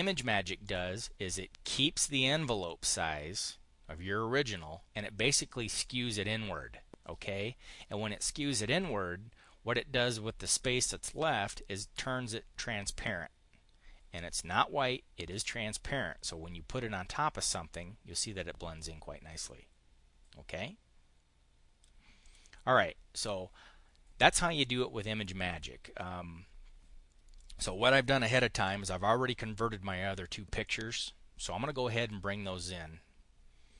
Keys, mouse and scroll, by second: 0.6 click, 15.2-21.8 drag, 22.0 click, 27.2 click, 28.4 Delete, 30.5-31.7 drag, 31.8 click.